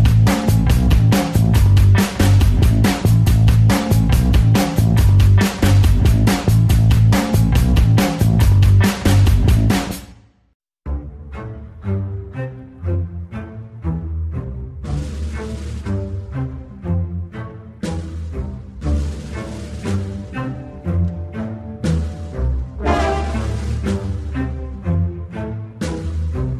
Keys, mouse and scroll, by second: 0.9 ctrl+z, 1.0-2.5 drag, 2.5 alt+right click, 2.8 alt+middle click, 3.0 alt+right click, 3.2 f, 3.4 ctrl+click, 4.1 f, 4.2 alt+click, 4.3 f, 4.5-6.0 drag, 6.0 alt+middle click, 6.2-7.4 ctrl+alt+drag, 7.4 alt+right click, 7.5 alt+click, 8.1 ctrl+z, 8.3-11.6 ctrl+alt+drag, 11.6 alt+middle click, 11.8-13.0 ctrl+drag, 13.0 alt+middle click, 13.2 ctrl+click, 14.1 alt+middle click, 14.4 ctrl+click, 15.1 alt+right click, 15.3 alt+click, 15.7 f, 16.0 ctrl+click, 16.4 ctrl+z, 16.5-17.5 ctrl+drag, 17.9-23.7 shift+drag, 23.7 p, 24.1 f, 24.2-25.7 drag, 25.7 f, 25.8-26.5 drag.